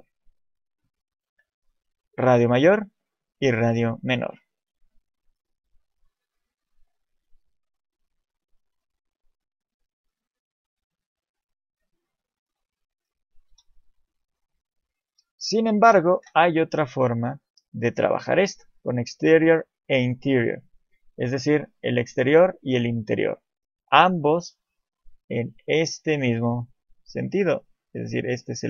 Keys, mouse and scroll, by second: 1.1 middle click, 5.9 click, 12.9 middle click, 13.5 KP_7, 14.4 shift+middle click, 15.0 click, 15.7 Delete, 16.2 shift+a, 24.8 click, 24.8 d.